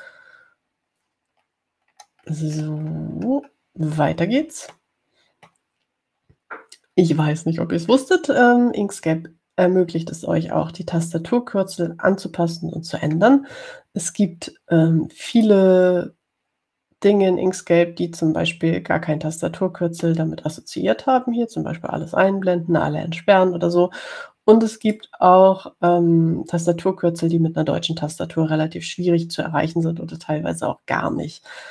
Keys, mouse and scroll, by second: 1.2 click, 2.6-4.7 scroll down 6, 6.0 click, 6.1 middle click, 16.6 click, 26.1 click.